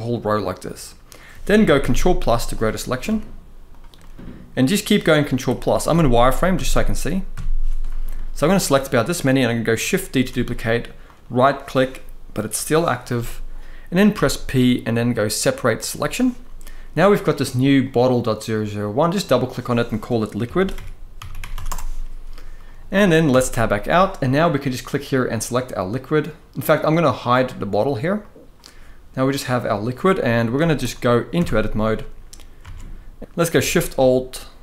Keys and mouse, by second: 1.4 ctrl+KP_Add, 1.5 ctrl+KP_Add, 1.7 ctrl+KP_Add, 2.8 z, 3.7-4.2 middle drag, 5.2 ctrl+KP_Add, 5.6 ctrl+KP_Add, 6.3 ctrl+KP_Add, 7.1 ctrl+KP_Add, 7.9-8.6 middle drag, 9.2-9.5 middle drag, 9.9 shift+d, 10.8-12.8 right drag, 13.8 p, 18.9-21.4 drag, 23.0 Tab, 25.0 click, 27.9 click, 29.8-30.1 middle drag, 30.3 z, 31.1 Tab, 32.3 alt+a, 33.2 g.